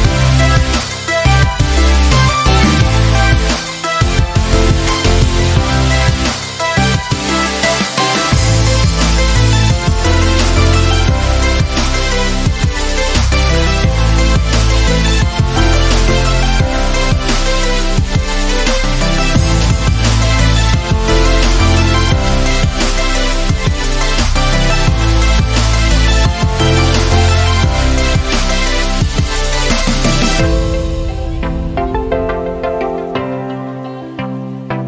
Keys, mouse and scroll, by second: 3.7-4.1 click, 4.6-4.9 click, 12.3-15.1 alt+drag, 27.6-28.7 drag.